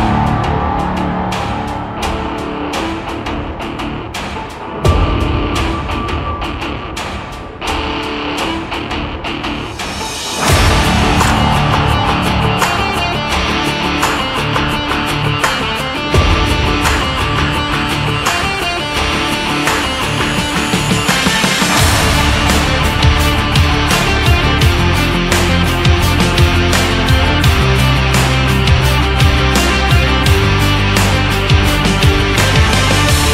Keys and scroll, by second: 6.5 shift+Up, 7.1 Down, 8.9 Up, 15.2 ctrl+x, 19.2 BackSpace, 20.7 ctrl+f.